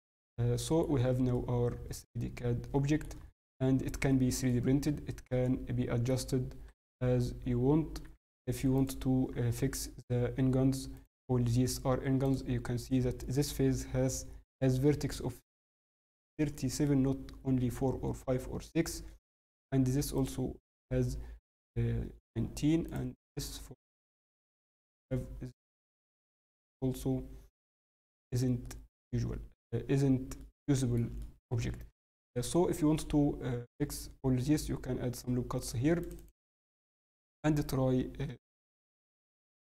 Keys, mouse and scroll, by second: 1.0-1.3 scroll, 1.3 middle click, 1.3 scroll down 2, 3.1 scroll, 3.2 Tab, 3.2 scroll up 1, 3.2 scroll, 3.6 scroll up 3, 3.8 Tab, 3.8 scroll down 1, 4.1 middle click, 4.6 Tab, 4.7 scroll, 4.9 scroll down 2, 5.2 middle click, 6.1-7.0 scroll up 9, 6.6 Tab, 7.0 Tab, 7.6 scroll, 8.4 scroll up 1, 12.2 click, 18.5 scroll, 18.9 scroll up 3, 19.0 scroll, 19.1 scroll down 4, 19.8 scroll down 1, 20.1 click, 24.9 click, 27.6 scroll, 28.6 middle click, 28.6 scroll down 2, 29.9-30.3 scroll down 3, 30.3 middle click, 31.2 shift+middle click, 31.5 scroll, 32.1 scroll up 4, 36.6 middle click, 38.5 click.